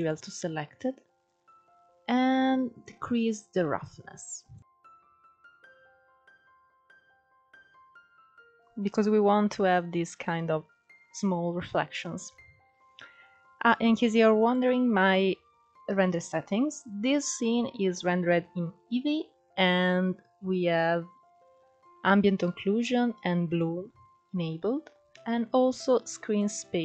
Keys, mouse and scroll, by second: 0.6 scroll down 3, 1.3-2.4 scroll down 1, 2.4-6.0 drag, 6.8 scroll up 3, 8.2 KP_0, 9.1-9.5 scroll up 5, 11.3 scroll down 2, 11.9 scroll down 2, 14.1 click, 14.9-15.4 scroll up 10, 23.0 click, 24.2-24.7 scroll down 2, 24.7-25.6 scroll down 1, 25.6-26.8 scroll down 1.